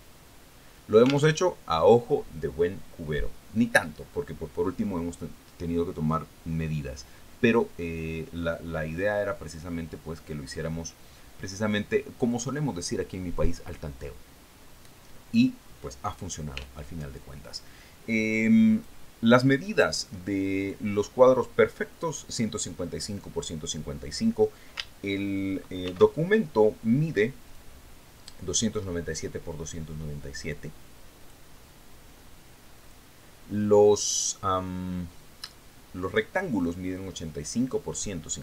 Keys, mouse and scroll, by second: 2.8 alt+Tab, 20.2 click, 22.1 click, 27.3 ctrl+shift+d, 29.0 click, 32.7 click, 34.3 click.